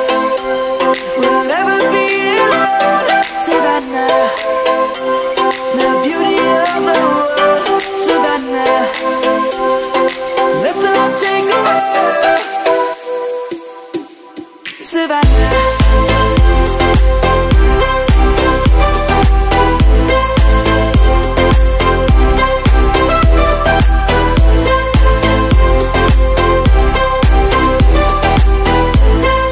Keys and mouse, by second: 0.2 middle click, 0.6 Tab, 1.2 click, 1.8 shift+middle click, 2.9 shift+middle click, 4.1 click, 4.5 middle click, 6.4 Tab, 8.2 click, 9.0 middle click, 12.0 shift+middle click, 12.2 shift+middle click, 13.4 middle click, 14.7 shift+middle click, 15.4 click, 15.7 Tab, 16.2 click, 18.0 click.